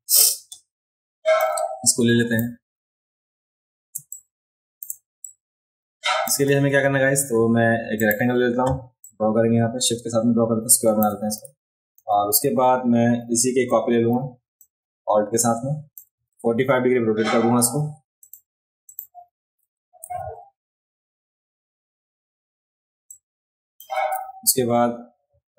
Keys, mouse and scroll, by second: 1.4 click, 3.9 space, 4.1 click, 5.2-6.3 drag, 8.0 click, 9.0-11.0 drag, 11.9 a, 14.7-15.9 alt+drag, 18.2 click, 18.9 click, 20.0 v, 23.1 shift+click.